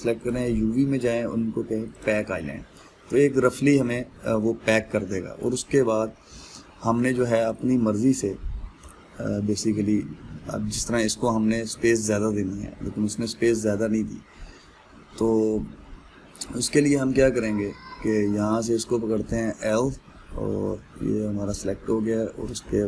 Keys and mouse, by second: 2.7-5.7 drag, 5.7-7.7 middle drag, 7.7 click, 8.1 click, 9.4 l, 11.0-14.6 middle drag, 14.6 click, 18.0 click, 19.8 l, 20.7-22.8 middle drag.